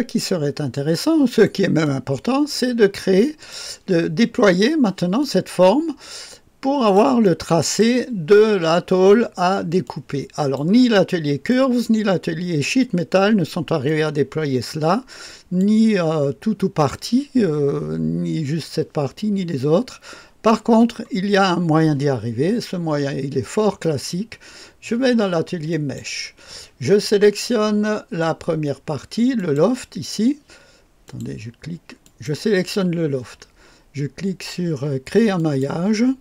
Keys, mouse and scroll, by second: 0.1 scroll down 2, 0.4-1.4 scroll up 2, 0.8-3.4 right drag, 1.7-3.9 drag, 5.1-7.7 drag, 5.1-6.9 right drag, 9.7-11.4 drag, 13.8-15.5 drag, 23.7 click, 25.6 click, 26.1 drag, 29.3 click, 31.0 click, 32.0 click, 35.3 click.